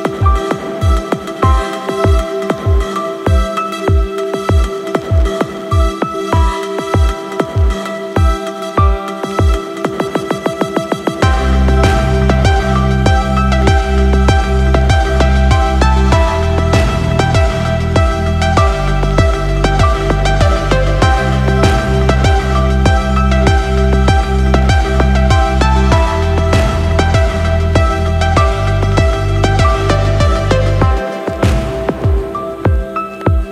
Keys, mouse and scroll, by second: 0.8 click, 1.9 click, 3.6-4.1 scroll down 3, 4.1-4.6 scroll up 3, 5.9 click, 6.6 space, 9.7 space, 10.6 click, 12.9-13.7 scroll up 3, 13.7-15.4 middle drag, 16.8 click, 19.6 click, 20.6 click, 21.2-21.7 scroll down 1, 21.7-22.7 middle drag, 23.0 click, 24.6 shift+a, 33.1-33.5 drag.